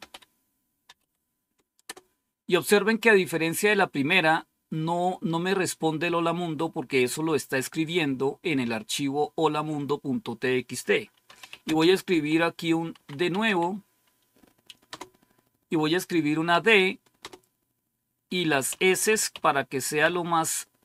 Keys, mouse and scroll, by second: 0.0-1.8 typing, 11.0-14.8 typing, 16.4-17.1 typing, 18.6-20.8 typing.